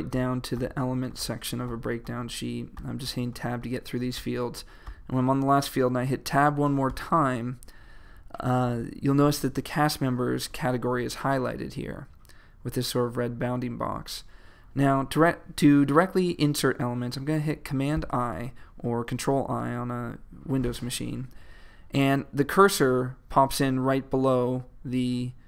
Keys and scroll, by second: 17.9 super+i.